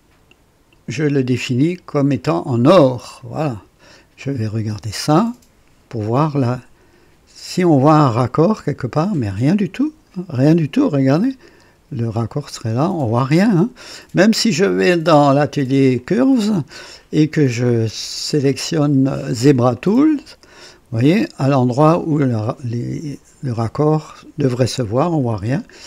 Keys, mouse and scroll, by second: 2.1 click, 3.1 click, 4.2 click, 5.1-10.3 drag, 10.4 click, 12.6-14.0 drag, 15.0 click, 16.0 click, 19.7 click, 20.7-21.7 drag.